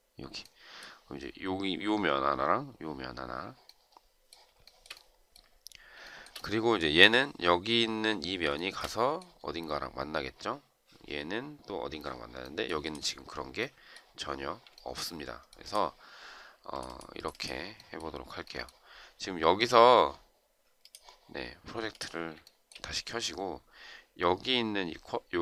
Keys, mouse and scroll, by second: 4.4 shift+right click, 8.4 shift+right click, 14.5 shift+right click, 22.3 shift+right click.